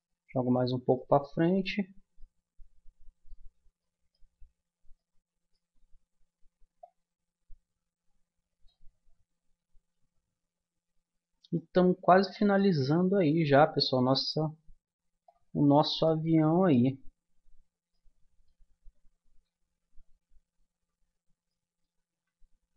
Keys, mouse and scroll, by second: 0.5 Tab, 6.8-8.5 drag, 10.7-12.8 middle drag, 14.9 click, 15.8 middle click, 19.0 a, 20.7 a, 22.1 a.